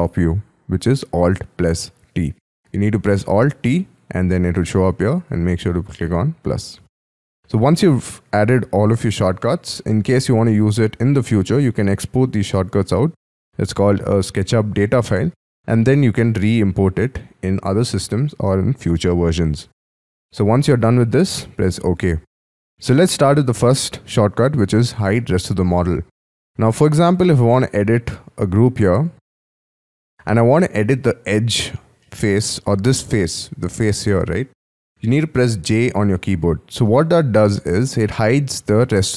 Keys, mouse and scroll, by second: 25.7 middle click, 26.5-27.1 scroll down 5, 27.1-27.5 scroll up 5, 27.5-28.4 scroll down 6, 28.4 scroll down 1, 28.5-28.9 scroll up 5, 29.4-30.1 scroll up 10, 30.1 middle click, 32.0 middle click, 35.7 j, 37.5-39.1 scroll down 6.